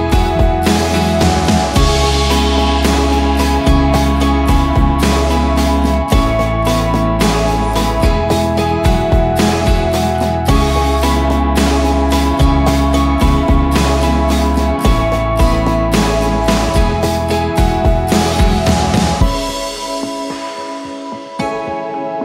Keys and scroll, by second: 7.7 Escape, 9.4 shift+Page_Up, 9.9 Escape, 11.5 F2, 12.8 c, 17.4 c, 17.6 Escape, 18.2 F4.